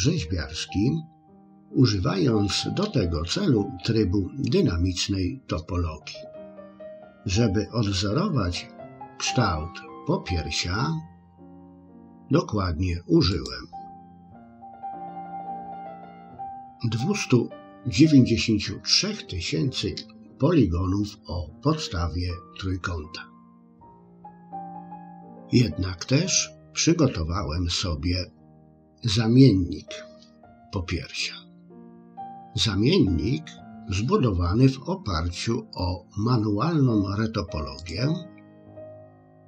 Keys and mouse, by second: 13.4-15.0 drag, 37.8 click.